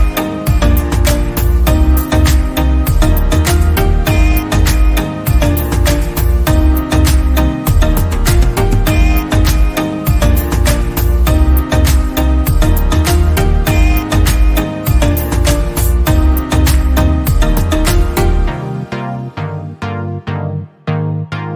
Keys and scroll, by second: 18.1 ctrl+z.